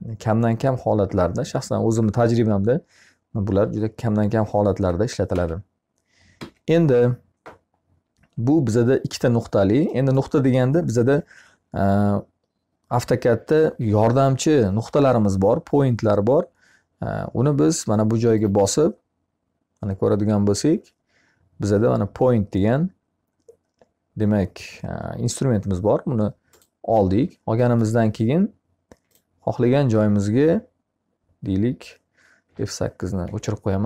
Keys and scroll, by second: 4.7 Escape, 32.7 F8.